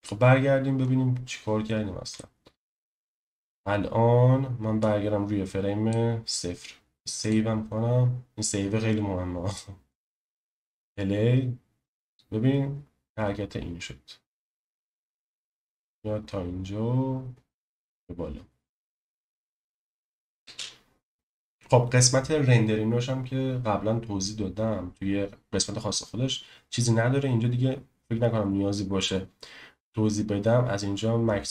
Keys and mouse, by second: 2.1 shift+middle click, 4.8-5.9 drag, 7.2-9.6 drag, 10.5 space, 20.4 space, 21.1 space.